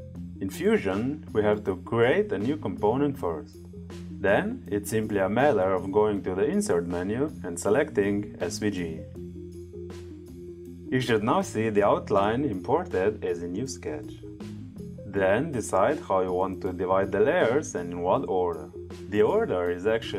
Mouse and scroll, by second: 1.6 right click, 3.0 click, 5.3 click, 6.6 click, 8.2 click, 10.3 click, 11.6 click, 12.8 click, 15.6 click.